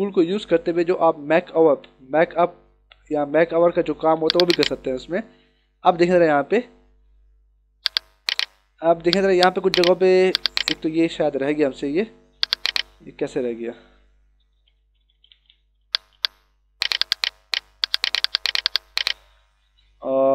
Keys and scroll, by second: 4.1 ctrl+=, 4.5 space, 5.9 ctrl+=, 7.7 h, 10.2 ctrl+=, 13.6 e.